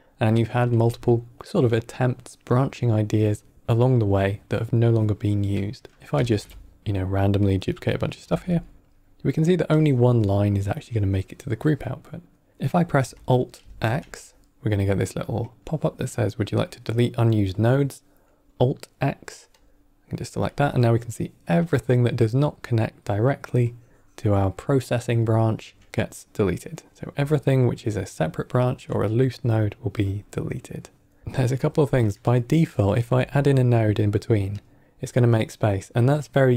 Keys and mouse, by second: 6.0 middle click, 6.0 click, 6.1 ctrl+shift+d, 7.3 click, 7.7 middle click, 8.1 shift+d, 9.6-10.2 drag, 10.5-12.2 drag, 12.4 drag, 13.5 alt+x, 23.6-25.5 drag, 29.9-31.0 drag, 31.3 middle click, 32.2 click, 33.0 shift+d.